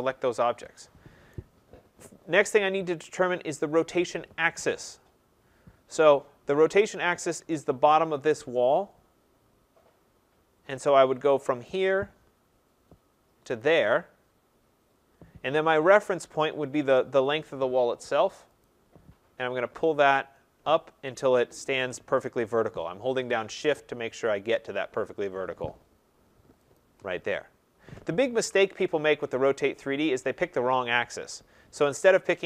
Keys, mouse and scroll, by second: 1.3 right click, 1.7 middle click, 1.8 middle click, 2.0 middle click, 2.8 middle click, 11.7 click, 13.6 click, 18.6 click, 26.7 shift+click, 28.4 ctrl+z, 29.3 right click, 32.1 click.